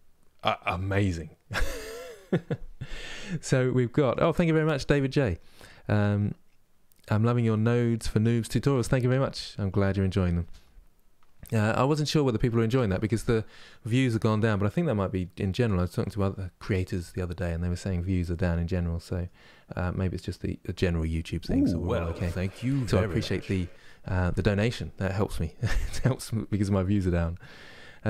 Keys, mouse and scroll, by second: 27.7-28.0 scroll up 2.